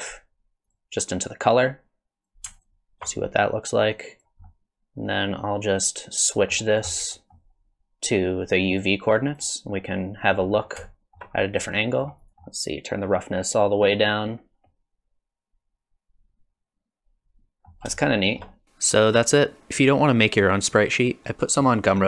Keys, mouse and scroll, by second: 1.2 click, 2.6 ctrl+shift+click, 3.9 click, 4.4 middle click, 7.1 middle click, 8.4 click, 9.8 middle click, 10.5-10.9 scroll up 3, 10.9 shift+middle click, 11.4 scroll up 1, 11.7 middle click, 12.2 click, 12.3 middle click, 12.3 scroll down 6, 13.1 click, 14.6 middle click, 18.0 shift+middle click, 18.5 middle click.